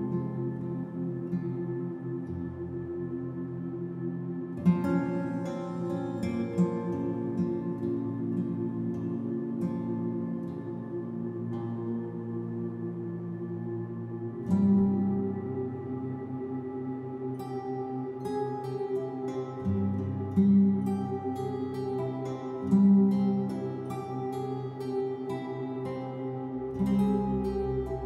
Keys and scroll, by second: 1.2 ctrl+t.